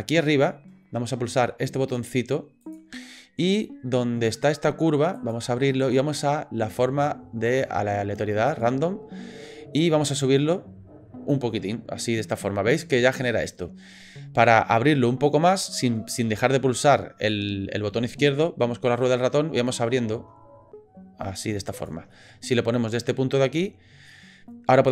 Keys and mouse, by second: 2.6 click, 5.1-9.5 drag, 11.3-21.9 drag, 22.1-24.1 middle drag.